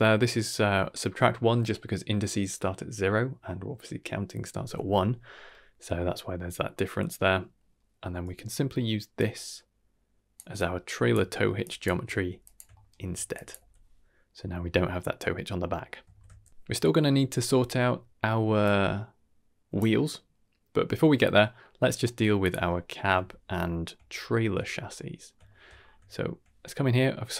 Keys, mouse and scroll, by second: 5.3 middle click, 5.8 middle click, 6.5-7.5 scroll down 2, 7.5 middle click, 9.1-10.3 drag, 10.5-11.1 drag, 11.2 shift+middle click, 11.6 shift+drag, 12.1 g, 12.7 shift+middle click, 13.3 drag, 13.5 x, 14.0 middle drag, 15.1-15.6 middle drag, 16.0 ctrl+s, 18.6-19.8 drag, 22.4 click, 22.9 middle drag, 23.3 shift+middle drag, 23.7 shift+middle drag, 24.0-24.7 scroll up 4, 24.5 middle drag, 24.9 middle drag, 25.4 shift+middle drag, 25.7 scroll up 2, 26.1 shift+middle click.